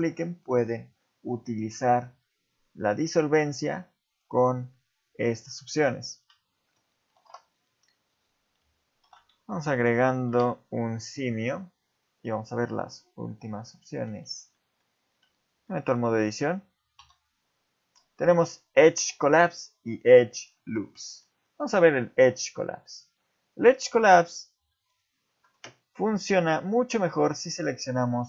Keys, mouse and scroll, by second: 4.1 click, 4.5 click, 5.0 click, 5.4 click, 5.6 click, 6.2 Tab, 7.2 Delete, 9.0 shift+c, 10.3 shift+a, 12.7-13.5 scroll down 4, 13.6 middle click, 14.1 z, 14.5 middle click, 15.1 Tab, 15.7 middle click, 16.0 scroll up 2, 17.0 x, 21.0 middle click, 21.3 scroll up 1, 21.7 ctrl+Tab, 23.5 click, 23.9 shift+middle click, 24.2 scroll up 2, 24.7 shift+middle click, 26.2 click, 26.8 shift+click, 27.6 click.